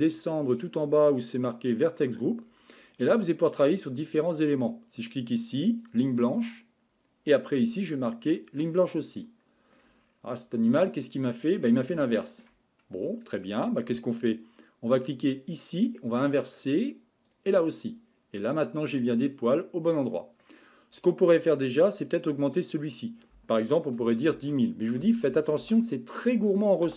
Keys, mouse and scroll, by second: 2.0-2.4 drag, 2.4-3.4 scroll down 9, 4.9 click, 7.7 click, 9.2-10.0 middle drag, 10.0-10.7 scroll up 9, 10.9-15.1 middle drag, 15.9 click, 17.3 click, 18.1-18.5 scroll down 2, 18.5-20.9 middle drag, 20.9-21.7 scroll up 15, 22.9-25.3 drag, 25.3 KP_0.